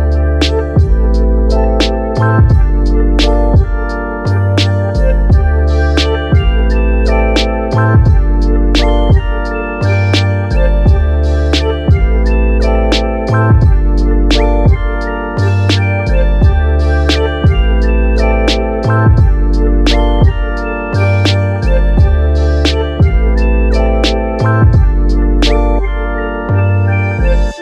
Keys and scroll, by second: 0.0-1.1 typing, 2.3-6.5 typing, 26.9-27.6 typing.